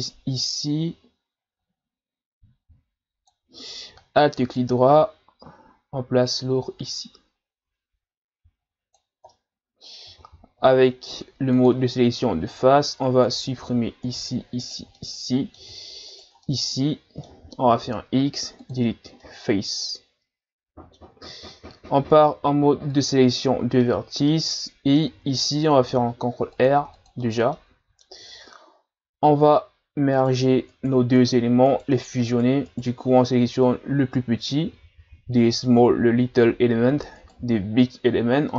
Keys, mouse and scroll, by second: 4.4 alt+right click, 6.3 click, 9.3-10.6 middle drag, 10.6 ctrl+Tab, 13.3 right click, 14.1 shift+right click, 14.6 shift+right click, 14.9-16.1 middle drag, 16.1 shift+right click, 16.4-17.7 middle drag, 17.7 x, 19.3-22.0 middle drag, 22.0 ctrl+Tab, 23.8-25.8 middle drag, 25.8 ctrl+r, 27.5 middle click, 28.2 Tab, 28.7-29.1 scroll down 2, 29.4-30.1 shift+scroll up 1, 30.1 right click, 30.7 right click, 31.2 right click, 31.7 right click, 32.3 right click, 32.7 right click, 37.2 shift+right click.